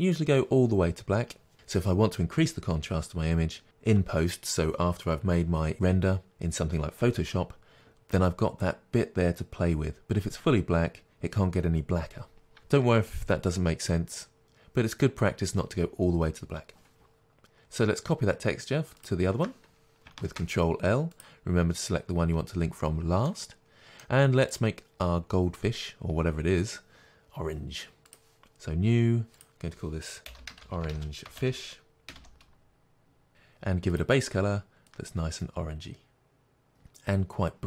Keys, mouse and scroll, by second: 17.2 shift+click, 21.2 ctrl+l, 23.3-24.6 middle drag, 24.6 click, 28.2 click, 33.3 Return, 33.3-34.7 drag.